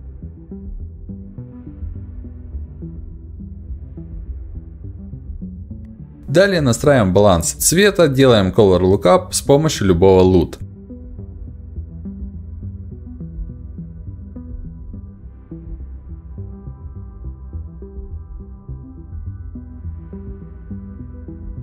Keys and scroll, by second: 10.7 ctrl+u.